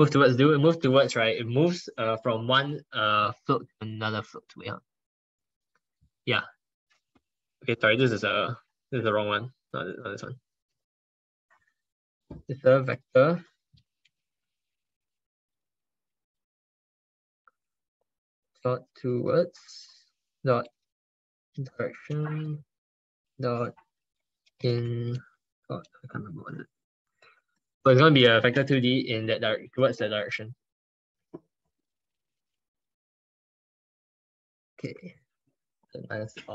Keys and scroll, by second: 7.8 ctrl+z, 11.1 ctrl+BackSpace, 11.8 ctrl+BackSpace.